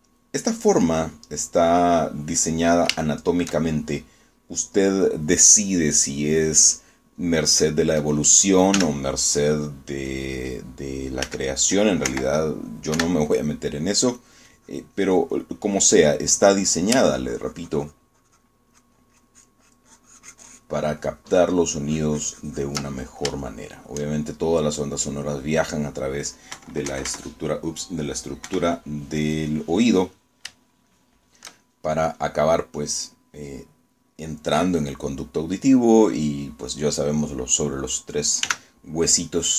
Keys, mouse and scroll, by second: 1.6 click, 2.2 middle click, 4.2 shift+middle click, 8.4 middle click, 9.8 f, 11.2 click, 12.4 f, 13.2 Escape, 14.0 3, 15.3-17.1 drag, 18.2-19.7 ctrl+drag, 19.8-23.0 ctrl+drag, 24.0 ctrl+middle click, 24.6 ctrl+shift+middle click, 26.3 scroll up 2, 27.6 KP_Subtract, 29.6 KP_Subtract, 30.3 click, 32.0 shift+click, 32.7 shift+middle click.